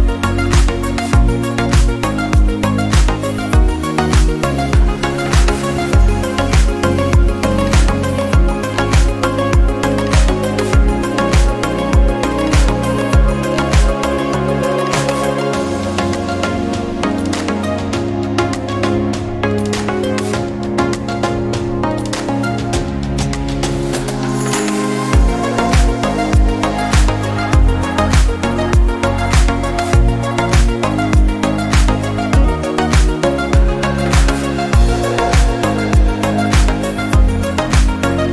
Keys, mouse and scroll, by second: 0.1-0.6 scroll up 1, 0.6-1.7 shift+middle drag, 1.7 f, 2.5 alt+z, 2.9 click, 3.2-3.8 scroll down 2, 3.8 KP_3, 4.2-5.1 scroll up 1, 5.1-6.2 shift+middle drag, 6.2 click, 7.0 KP_3, 7.7 g, 8.7 middle click, 9.1 scroll up 3, 9.7 shift+middle click, 10.5 click, 11.9 g, 13.1 KP_3, 13.4-13.8 scroll down 4, 13.8 scroll up 1, 14.7 scroll down 1, 14.9-16.1 scroll up 1, 16.1 scroll down 2, 16.6 shift+middle click, 17.1 click, 17.9 ctrl+r, 20.4-21.7 middle drag, 21.7 click, 21.9 scroll down 1, 22.0 middle click, 22.3 scroll up 2, 22.7-24.8 shift+middle drag, 24.8 Tab, 25.8 click, 26.2-29.3 drag, 29.3-30.9 middle drag, 30.9-32.3 right drag, 32.3-33.1 drag, 33.2 click, 34.3 click, 34.6 middle click, 34.9-35.2 scroll up 1, 35.2 shift+middle click, 35.8 Tab, 36.1-37.3 scroll up 1, 37.3 2, 38.0 click.